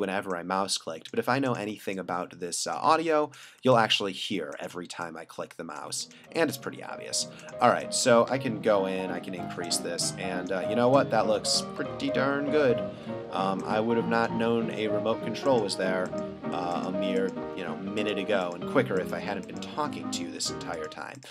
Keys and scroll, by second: 8.5 ], 11.9 super+z, 12.9 ], 13.5 ].